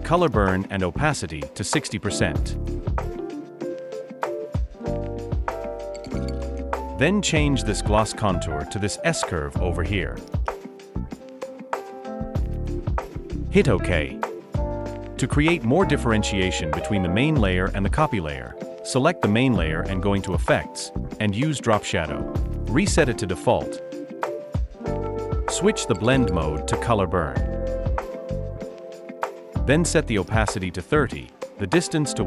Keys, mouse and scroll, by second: 31.8-32.2 typing.